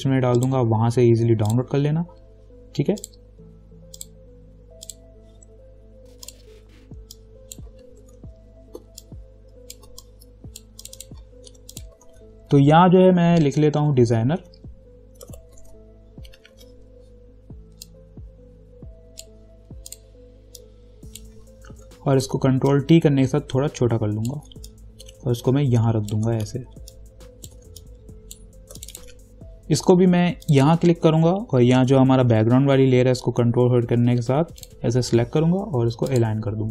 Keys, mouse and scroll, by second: 8.3 ctrl+t, 9.3-11.1 alt+drag, 11.7 t, 11.9 click, 12.3 ctrl+a, 13.8-16.4 typing, 16.7 ctrl+a, 18.1-22.0 drag, 22.0 ctrl+t, 22.9-27.1 alt+drag, 27.1 alt+click, 28.0 shift+click, 31.2 scroll down 1, 34.8 ctrl+click.